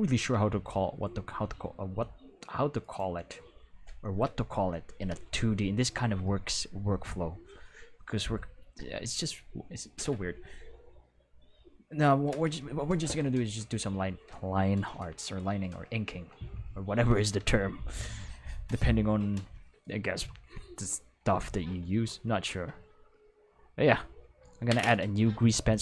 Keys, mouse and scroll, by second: 2.8 right click, 20.5 click, 23.1 click, 23.9 click, 24.1 click, 25.6 click.